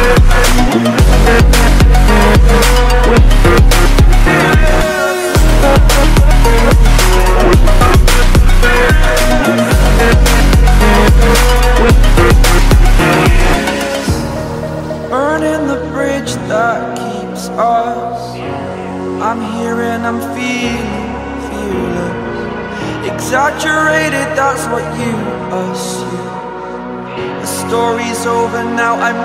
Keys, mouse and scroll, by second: 0.7 shift+click, 3.2 click, 3.6 scroll down 1, 4.1 click, 4.5 scroll down 1, 4.7 click, 6.2 ctrl+z, 7.1 ctrl+Page_Down, 7.3 ctrl+Page_Down, 9.2 click, 9.7 scroll down 1, 10.0-13.2 drag, 15.0-16.9 drag, 17.8 ctrl+z, 18.7-23.6 drag, 24.3 scroll down 1, 24.9 click, 25.4 scroll down 1, 25.9-28.2 scroll up 1.